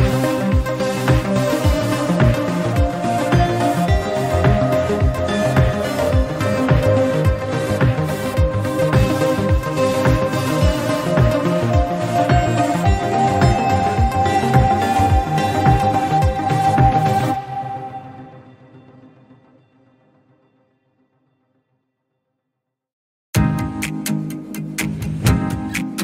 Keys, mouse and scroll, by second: 1.5-1.9 scroll up 1, 1.9-3.6 drag, 4.7-5.7 scroll down 14, 5.7 alt+z, 6.5 click, 6.7 scroll down 3, 6.9 shift+middle drag, 7.1 drag, 7.9-9.8 drag, 10.4-12.7 middle drag, 12.7 KP_1, 13.6-14.0 shift+middle drag, 14.0 click, 15.3-16.4 drag, 16.4-16.9 scroll down 1, 17.6-21.3 drag, 21.3-22.2 scroll up 8, 21.7 shift+middle click, 22.3-23.1 shift+middle drag, 23.1 scroll up 2, 23.3-24.2 shift+middle drag, 24.2-25.5 shift+drag, 25.5 scroll up 1, 25.8-26.0 shift+middle drag.